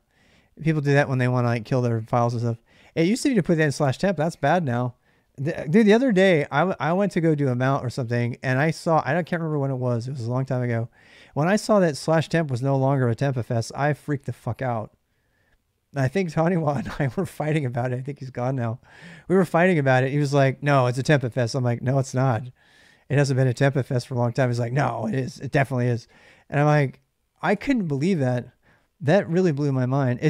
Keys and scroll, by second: 5.3 ctrl+a, 5.6 typing, 6.6-9.5 typing, 26.4 ctrl+[, 26.6 k, 27.3 k.